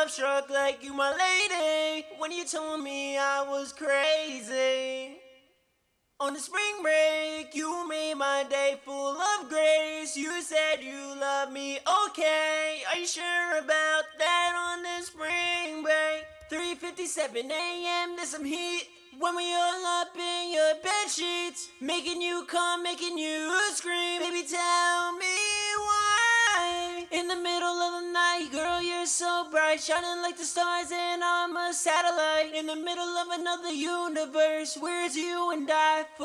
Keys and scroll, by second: 0.5 ctrl+super+w, 14.7-15.8 typing, 16.4 ctrl+super+w, 25.5-26.5 typing, 26.7 ctrl+super+w.